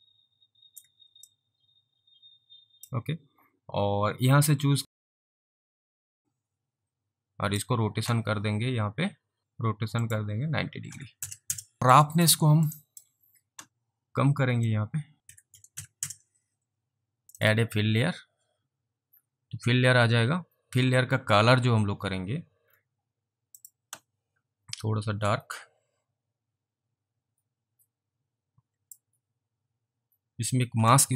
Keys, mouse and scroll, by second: 1.4 alt+click, 4.8 click, 6.2 alt+click, 9.4 click, 10.1 click, 10.9-11.2 typing, 11.5 Return, 11.8 alt+middle click, 12.1 alt+click, 12.5 alt+middle click, 12.8 alt+right click, 14.6 alt+right click, 14.8 click, 15.0-16.2 typing, 16.1 click, 17.2 Return, 17.4 click, 21.9-22.6 scroll down 3, 22.6 scroll up 3, 23.6 click, 25.2 click, 25.5 click.